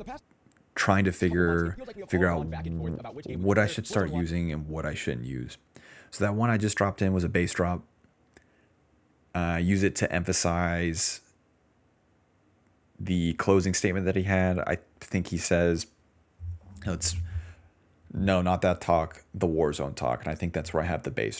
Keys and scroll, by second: 0.0-1.1 typing, 4.1 space, 7.8-8.6 typing, 10.8-12.2 typing.